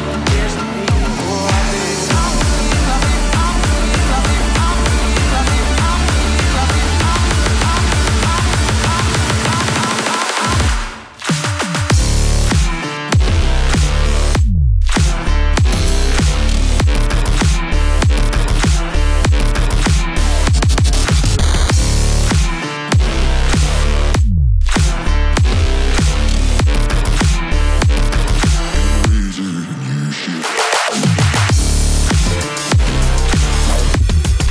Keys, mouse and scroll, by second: 1.6 click, 3.8-16.6 drag, 22.0 click, 26.3 typing, 26.6 Return, 28.5-29.6 typing, 28.8 click.